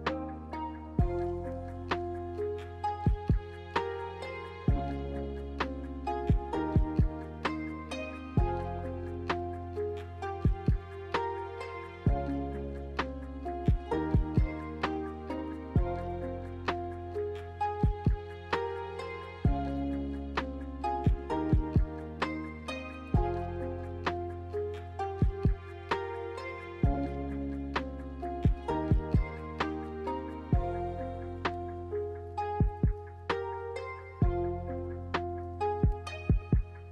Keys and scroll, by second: 1.1 ctrl+c, 1.3 ctrl+v, 1.9 ctrl+c, 2.1 ctrl+v, 16.7 Delete, 21.4 ctrl+c, 21.6 ctrl+v, 25.5 m, 30.9 Escape, 31.8 ctrl+z.